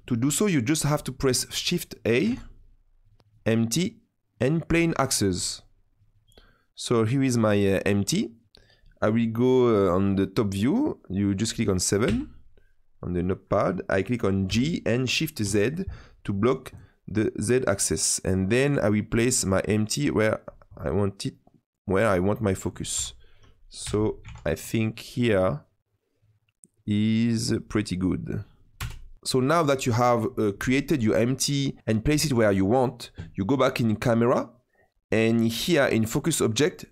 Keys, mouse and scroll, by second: 2.2 shift+a, 6.4-7.0 middle drag, 7.0-7.4 scroll down 2, 7.4-10.5 middle drag, 12.0 KP_7, 14.4 g, 20.4-21.3 scroll up 10, 21.3-22.9 middle drag, 22.9 KP_7, 23.8 g, 28.7 KP_0, 31.8 click, 33.4-34.2 scroll up 1, 34.2 click, 36.5-36.9 drag.